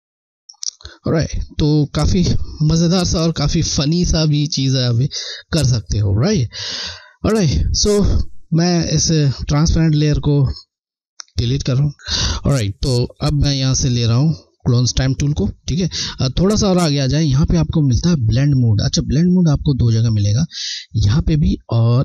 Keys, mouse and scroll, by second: 1.0 alt+scroll down 1, 3.9 scroll, 9.1 click, 13.5 click, 17.4 Left.